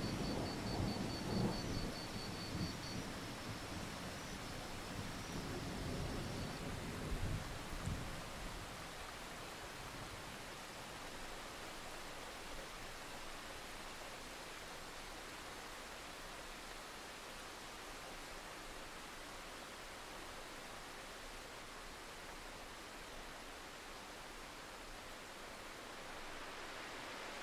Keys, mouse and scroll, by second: 2.2-2.9 alt+scroll down 1, 2.9 click, 3.8 ctrl+z, 4.1 click, 6.9 shift+click, 10.3-10.6 alt+scroll up 1, 10.6-13.7 drag, 14.3-15.2 scroll down 1, 15.2-19.2 drag, 20.5 alt+scroll down 1, 20.8 alt+scroll up 1, 21.3 click, 21.8 alt+scroll down 1, 22.0 click, 23.2 shift+click, 24.2 ctrl+g, 25.4 alt+scroll down 1, 26.2-27.4 alt+drag.